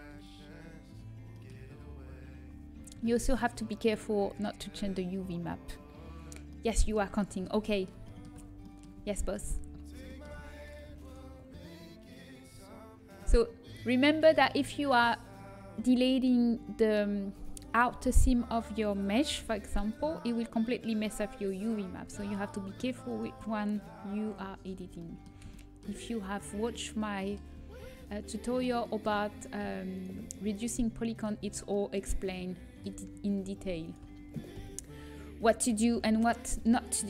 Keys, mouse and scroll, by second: 0.1 Delete, 0.4 middle click, 8.6-11.6 middle drag, 19.2 Delete, 20.1 click, 21.7 middle click, 22.1 ctrl+z, 24.3 middle click, 24.9 middle click, 25.5-27.1 middle drag, 27.8 middle click, 28.9 middle click, 29.9-33.7 middle drag, 33.7 right click, 34.5 Delete, 36.6 Delete.